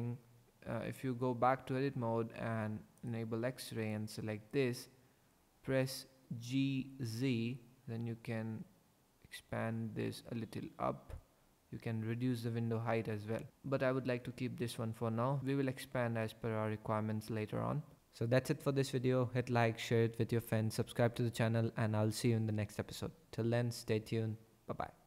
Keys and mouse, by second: 3.0 click, 6.6 g, 7.1 z.